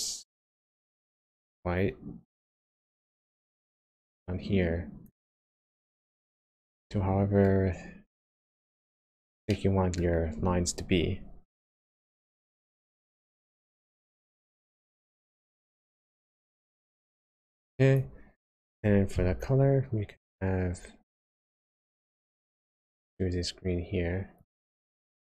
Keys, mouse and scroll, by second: 6.5 middle click, 7.9-8.5 scroll up 2, 8.9-9.3 scroll down 1, 9.4 shift+middle click, 12.9 click, 17.0 click, 20.0 click.